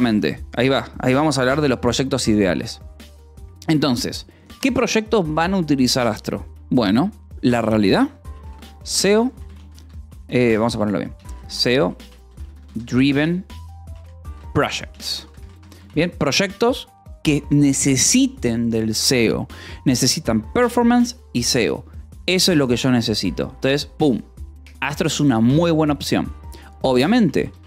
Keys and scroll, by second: 4.5 space, 8.5 o, 9.2 :, 9.4 space, 10.1 BackSpace, 11.7-16.5 typing, 16.8 Escape, 26.7-27.6 typing.